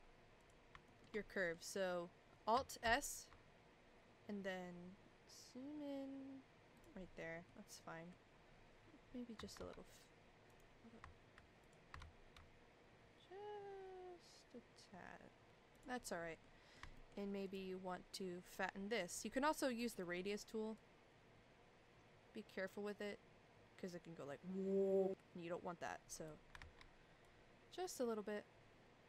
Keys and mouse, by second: 0.4 click, 0.9 shift+middle click, 1.3 middle click, 2.8 alt+s, 7.5 middle click, 10.5 click, 11.6 click, 12.0 alt+s, 16.5 middle click, 16.9 shift+middle click, 17.5 click, 20.0 middle click, 20.7-26.2 drag, 26.6 ctrl+z, 27.3-29.0 drag.